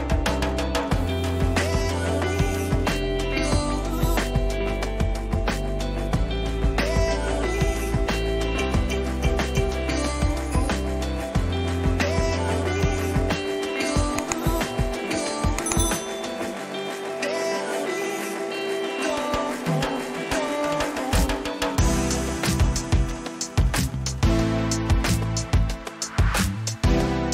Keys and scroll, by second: 1.3 ctrl+t, 2.8 ctrl+-, 4.4 ctrl+-, 15.3 Return, 15.9 ctrl++, 18.3 ctrl+-, 19.1 ctrl+alt+z, 21.3 ctrl+t, 21.9 ctrl+-.